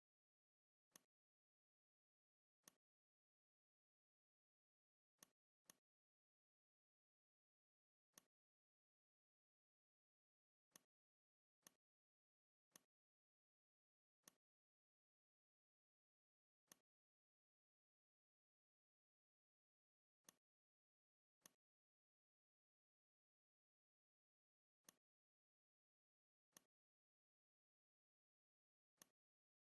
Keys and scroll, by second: 4.0 a, 4.5 v, 7.8 r, 9.4 v, 10.2 z, 11.3 space, 12.3 v, 18.7 r, 19.3 v, 23.0 a, 23.6 v, 26.2 r, 27.4 v.